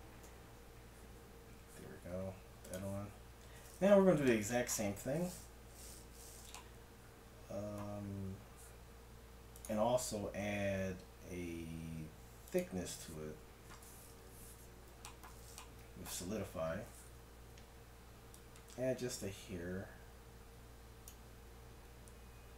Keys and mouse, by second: 3.7 click, 4.3-9.6 middle drag, 9.6-11.3 drag, 13.4-16.5 middle drag, 14.2 KP_Decimal, 16.5 t, 17.4-18.4 middle drag, 18.4-20.2 drag.